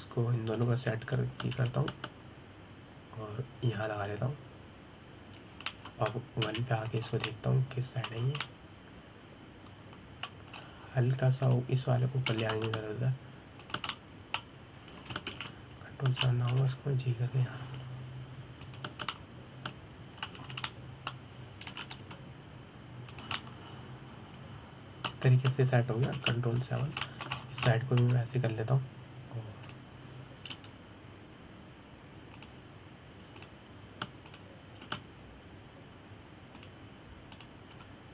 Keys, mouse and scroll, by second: 1.0 click, 2.2 shift+click, 3.4 g, 7.4 middle click, 8.1 KP_1, 8.7 scroll up 3, 8.9 middle click, 9.9 scroll down 3, 10.1-12.2 middle drag, 12.2 scroll up 3, 13.1 click, 13.9 g, 15.5 scroll up 1, 15.6-17.0 middle drag, 17.0 ctrl+KP_7, 18.3 g, 20.8-22.1 middle drag, 22.1 scroll down 3, 22.3-23.4 middle drag, 23.4 g, 25.0-27.0 middle drag, 27.0-27.8 scroll down 3, 27.8 ctrl+KP_7, 28.4 scroll down 3, 28.7 shift+middle click, 29.0 scroll up 2, 29.3-31.3 shift+middle drag, 31.3 click, 32.2 g, 35.0 click, 35.9 click, 36.6 g.